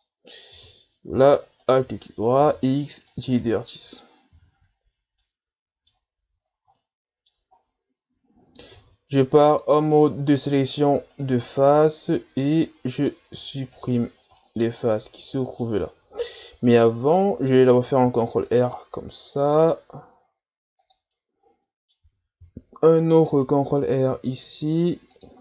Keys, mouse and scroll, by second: 0.5 z, 1.4 alt+right click, 2.4 x, 4.3 z, 5.2-6.4 middle drag, 6.4-6.8 shift+scroll down 5, 6.8 middle click, 7.6 ctrl+scroll down 1, 7.9-8.5 scroll up 1, 8.7 ctrl+Tab, 9.9 middle click, 10.7 right click, 11.1 shift+right click, 11.4-13.7 middle drag, 13.7 shift+right click, 14.0-14.4 scroll up 1, 14.4-17.1 middle drag, 17.1 right click, 18.1 ctrl+r, 21.1-22.4 middle drag, 22.4 ctrl+r.